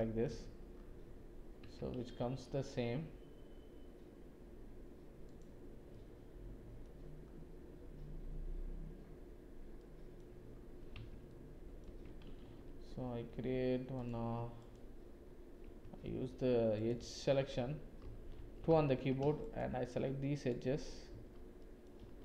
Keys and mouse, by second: 0.0 click, 0.3 Tab, 1.6 Tab, 2.2 ctrl+r, 6.0 middle click, 9.8 middle click, 10.9 Tab, 11.3 middle click, 11.9 Tab, 12.4 ctrl+r, 14.6 alt+click, 16.7 click, 17.5 alt+2, 18.3 1, 21.1 shift+z, 21.6 shift+click.